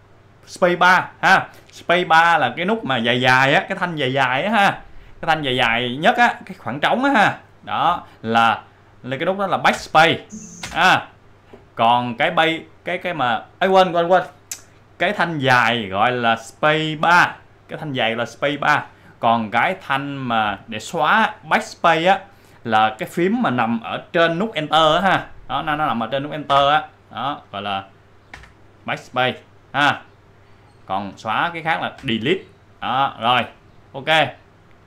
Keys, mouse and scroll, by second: 9.7 space, 10.6 space, 26.1 click, 27.8 click, 29.7 click, 32.7 click, 33.6 click.